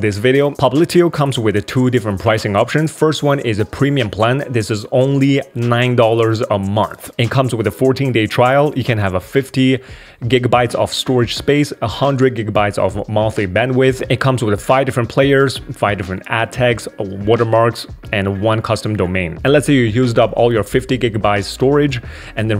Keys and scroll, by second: 2.3 super+2.